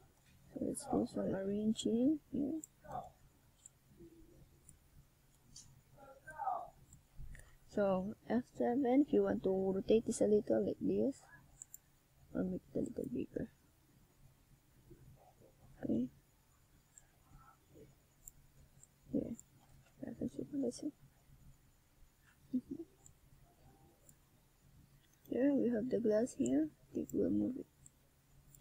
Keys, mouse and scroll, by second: 2.4 click, 2.7 right click, 3.0 right click, 3.9 shift+right click, 4.0 shift+right click, 4.2 s, 5.1 shift+right click, 5.4 s, 6.4 right click, 6.8 shift+right click, 7.2 shift+right click, 7.4 s, 8.8 click, 8.9 a, 9.3 Tab, 10.2 middle click, 11.9 click, 14.8 middle click, 17.2 KP_1, 19.4 click, 19.5 click, 19.8 click, 20.9 click, 21.0 click, 21.8 click, 22.8 click, 23.0 click, 24.0 click, 24.2 click, 24.4 click, 24.6 click, 25.4 click, 25.5 click, 26.9 click, 27.7 click, 27.9 click, 28.1 click, 28.2 click, 28.5 click.